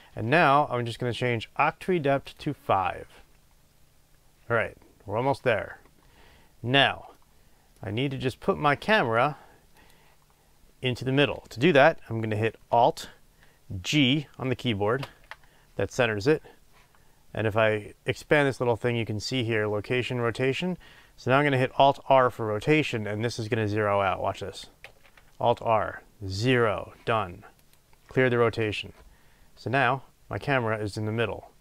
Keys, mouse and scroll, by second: 7.1-9.7 middle drag, 8.1-9.7 scroll down 2, 9.7 click, 15.0 alt+g, 18.2-21.9 drag, 18.2 typing, 24.8 alt+r, 27.7 click, 29.1-29.5 scroll up 1.